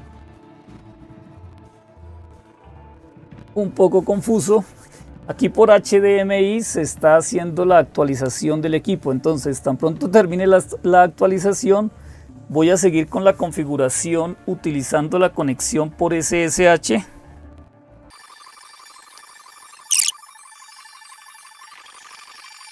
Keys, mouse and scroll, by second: 0.0-22.7 typing.